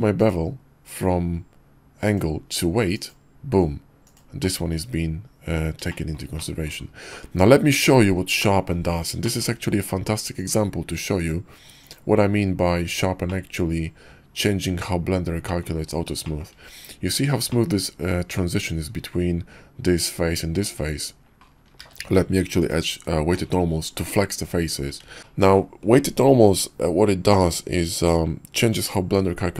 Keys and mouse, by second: 4.4 click, 5.9-6.2 shift+middle drag, 6.4 click, 8.4 click, 9.2 shift+middle click, 10.4-11.9 drag, 11.9 right click, 13.3-15.6 middle drag, 16.1-16.4 shift+middle drag, 17.5 shift+middle click, 21.8 q, 25.1 ctrl+z, 25.2-25.6 drag.